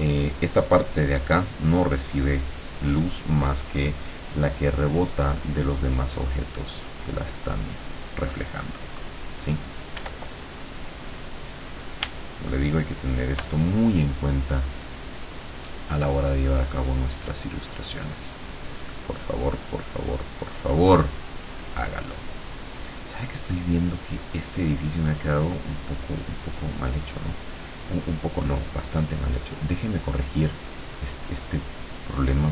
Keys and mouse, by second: 10.0 r, 12.0 r, 14.8 click, 16.4 click, 17.2 click, 18.6 click, 19.5-24.3 drag, 25.0-26.4 drag, 26.5 click, 28.7 click, 30.8 click, 31.8-32.5 drag.